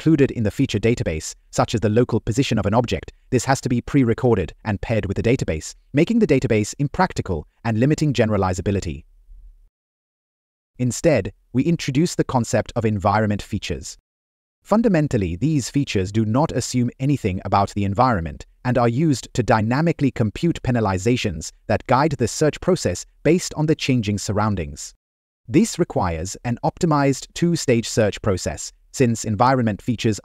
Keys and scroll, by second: 2.7 Right, 5.0 Right, 9.3 Left, 9.9 Right, 11.0 Left, 11.3 Up, 12.1 Left, 13.3 Right, 16.2 Down, 19.8 Left, 22.6 Down.